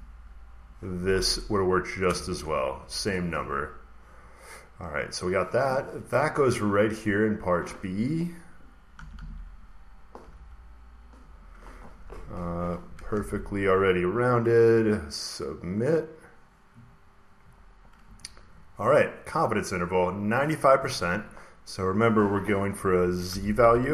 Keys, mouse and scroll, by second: 1.6-2.6 drag, 1.9 Return, 4.5 click, 6.5 click, 6.7 click, 6.7 scroll down 1, 8.4 scroll down 1, 8.6 middle click, 8.8 typing, 10.1-13.5 typing, 15.8 click, 16.9 scroll, 17.5 scroll, 20.1 click, 21.3 click, 21.3 scroll, 21.7 click, 22.9-23.9 typing, 23.6 click.